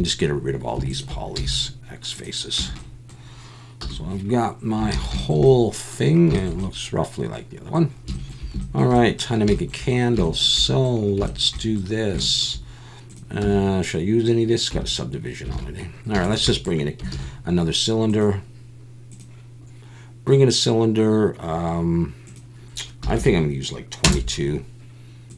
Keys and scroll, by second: 1.4 x, 2.6 Tab, 3.8 /, 4.9 alt+a, 13.4 Tab, 14.7 Tab, 15.5 alt+a, 17.1 shift+a, 23.2 2.